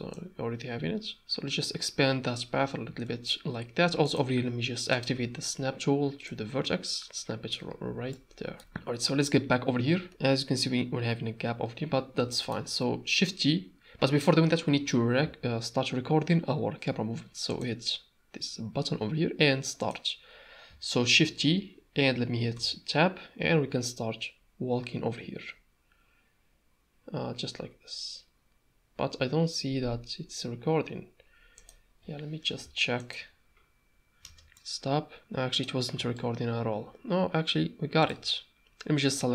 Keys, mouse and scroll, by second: 0.2-1.2 drag, 3.1 shift+Tab, 4.0-5.3 drag, 6.4-7.5 drag, 7.9 Tab, 8.1-8.6 middle drag, 8.6 a, 8.6 KP_0, 10.1 n, 12.3 shift+middle click, 17.5 click, 19.8 click, 21.3 shift+t, 33.0 click, 34.2 space, 34.7 middle click, 35.2 click, 36.1-38.1 shift+drag, 39.0 click.